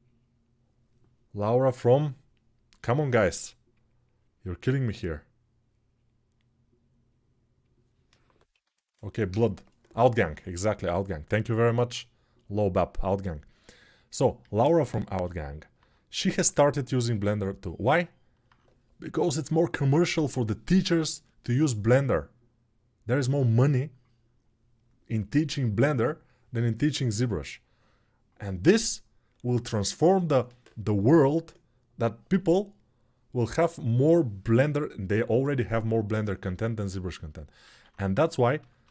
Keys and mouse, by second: 14.2 alt+q, 37.4 alt+q, 38.4 shift+r.